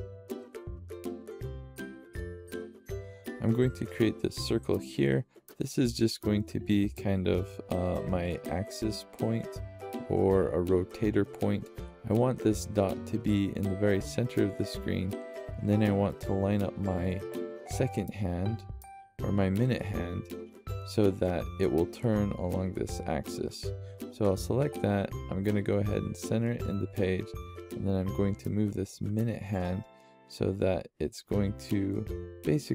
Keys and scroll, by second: 0.0-0.4 typing, 31.3 =, 31.5 =.